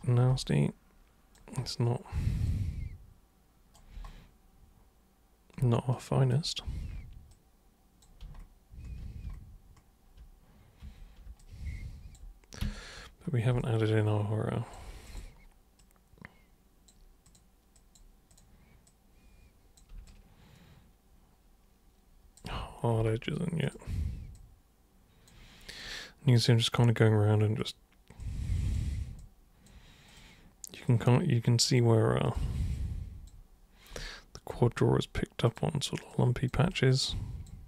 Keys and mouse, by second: 0.4 alt+super+click, 2.5-3.8 super+right drag, 6.0 super+click, 6.7 super+w, 7.3 super+click, 10.8 super+3, 11.4-12.2 alt+super+drag, 12.6 super+1, 13.6-14.7 alt+super+drag, 15.1 super+click, 15.8 super+click, 17.3 super+click, 17.8 super+click, 18.3 super+click, 18.9 super+click, 20.1-22.4 alt+super+drag, 23.7 super+click, 24.4 super+click, 25.7 super+click, 26.4 super+click, 27.6 super+click, 28.2 super+click, 29.2-29.7 alt+super+drag, 30.1 super+click, 30.9 super+click, 32.3 super+click, 32.7 super+click, 34.1 alt+super+click, 35.5 super+click, 36.1 super+click, 36.7 alt+click.